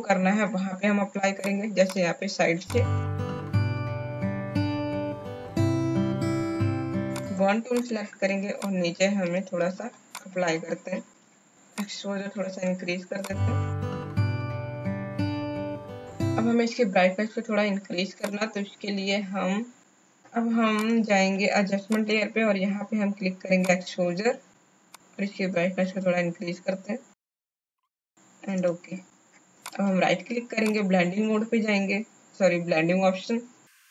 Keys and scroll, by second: 3.2-6.1 typing, 14.3 space, 15.4 space.